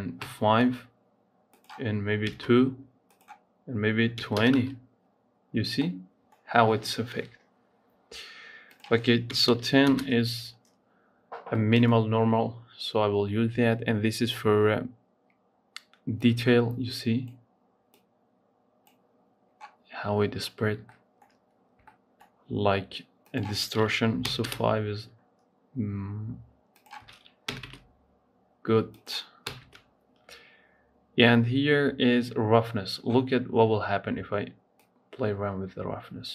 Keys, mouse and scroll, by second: 5.3 scroll up 2, 5.6-8.5 middle drag, 8.5-11.0 drag, 11.0-11.4 scroll down 2, 11.5-14.5 middle drag, 16.0-19.8 drag, 19.8 scroll up 3, 20.5 scroll up 2, 20.6-23.0 shift+middle drag, 23.0-26.1 drag, 26.5-31.7 drag, 33.2-34.7 scroll down 2, 34.7-36.3 drag.